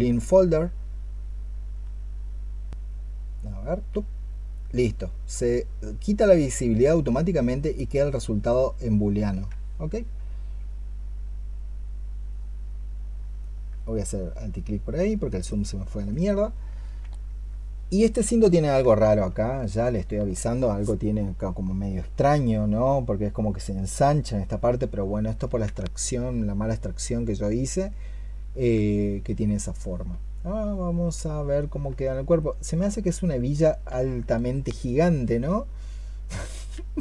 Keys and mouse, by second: 13.3 alt+click, 15.3 alt+click, 25.8 alt+click, 31.4 double click.